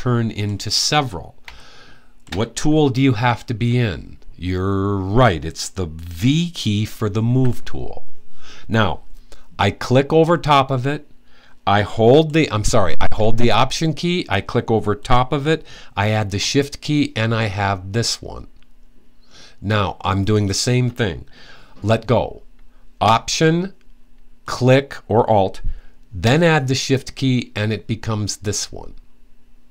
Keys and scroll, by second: 7.0 v.